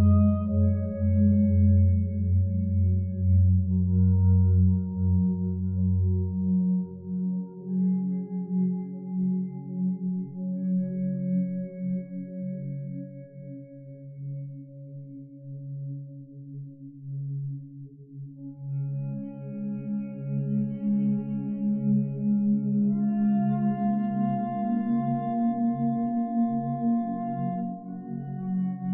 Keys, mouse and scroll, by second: 12.2 2, 12.4 Return, 27.1 Escape.